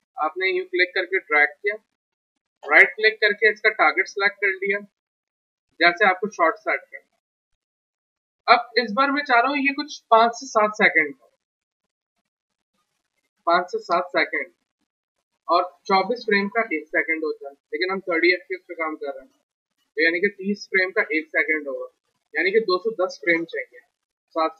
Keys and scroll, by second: 7.0 w.